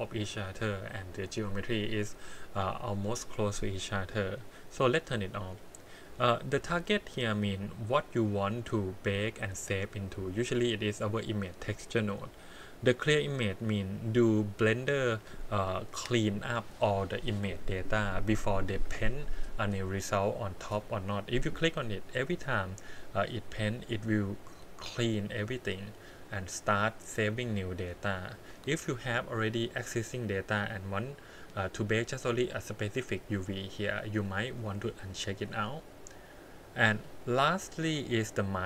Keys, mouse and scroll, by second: 6.0-6.7 scroll down 3, 6.7-9.3 drag, 10.7 click, 11.0 click, 35.0 click.